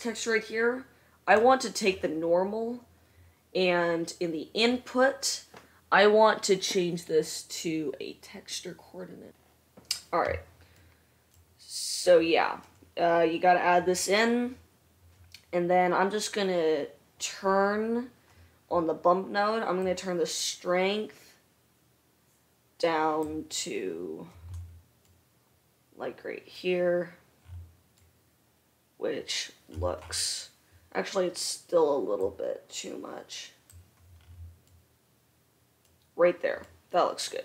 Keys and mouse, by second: 11.6-37.4 drag, 36.9 middle click, 36.9 right click.